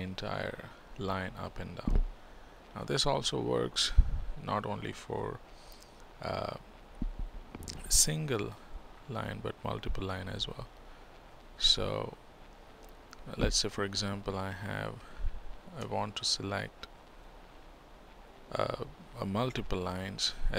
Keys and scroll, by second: 5.1 ctrl+d.